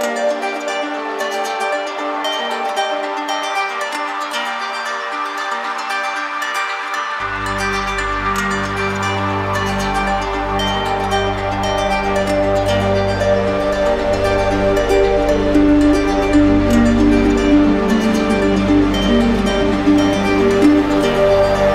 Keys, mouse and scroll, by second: 1.3 alt+click, 4.1 click, 5.0 shift+click, 8.2 click, 9.2 click, 10.9-11.9 drag, 13.3-14.3 drag, 20.6 click, 20.9 ctrl+z, 21.5 click.